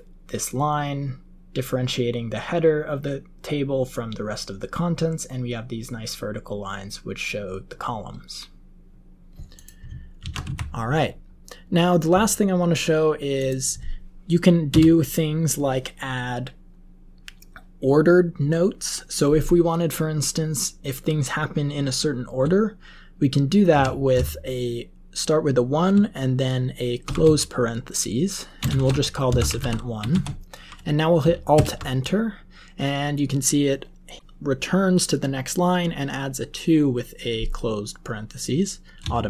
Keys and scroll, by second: 10.1 ctrl+x, 10.4 1, 14.6 Return, 23.7 typing, 27.0 typing, 28.5-30.1 typing, 31.5 alt+Return, 39.1-39.2 typing.